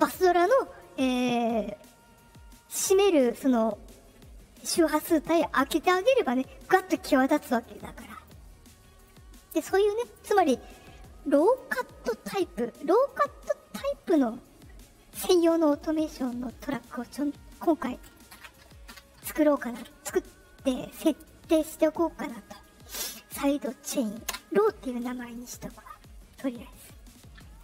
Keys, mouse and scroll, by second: 7.7 click, 8.9 right click, 9.6 click, 11.3 click, 13.9 click, 15.6 middle click, 16.4 click, 26.8 middle click, 27.4 click.